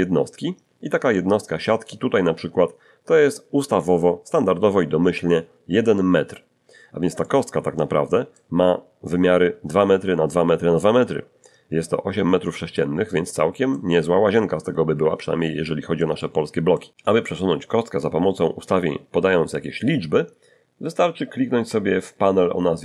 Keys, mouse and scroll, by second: 7.2-8.5 middle drag, 11.3-13.9 middle drag, 14.1-14.6 scroll up 1, 15.2 scroll up 1, 15.6-16.8 shift+middle drag.